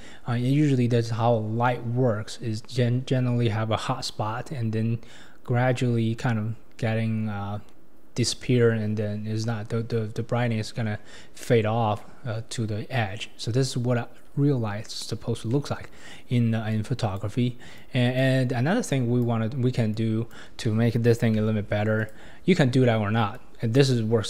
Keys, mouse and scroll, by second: 13.4-15.0 scroll down 2, 15.0-15.5 scroll down 4, 15.5-16.7 middle drag, 16.7 click, 17.8 click, 18.9 click, 19.9-21.4 drag, 21.4 g, 23.3 click.